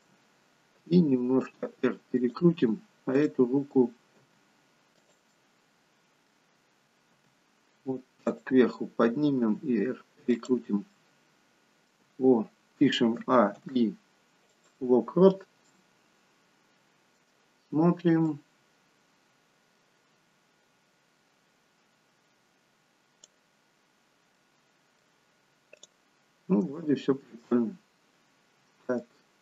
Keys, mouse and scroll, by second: 0.9 r, 3.2 click, 4.1 g, 5.5 middle click, 6.5-7.4 scroll down 1, 7.4-8.0 scroll down 1, 7.4 g, 9.5 r, 11.1 middle click, 13.2 a, 13.6 i, 15.4-15.8 scroll down 3, 15.8 middle click, 18.4 click, 23.6-24.3 scroll down 3, 24.3 middle click, 24.3-25.6 scroll down 2, 25.9 click, 26.9 shift+middle click, 27.8-28.4 scroll up 4, 28.4-29.0 scroll down 3, 29.0 middle click.